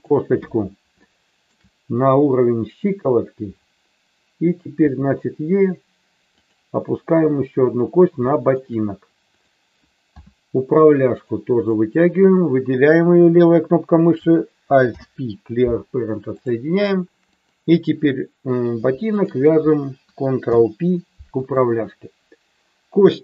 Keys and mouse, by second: 1.0 shift+middle click, 4.8 e, 6.3 click, 8.3 shift+middle click, 9.2 click, 10.1 e, 11.1 click, 14.8 alt+p, 17.3 click, 19.1 shift+click, 20.5 ctrl+p.